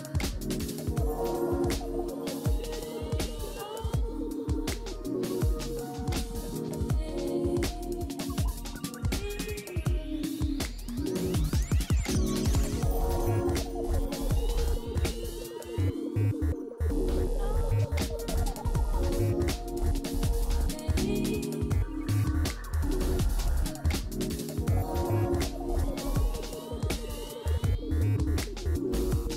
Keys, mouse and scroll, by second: 22.6-23.7 scroll up 2, 23.8-24.1 scroll down 3.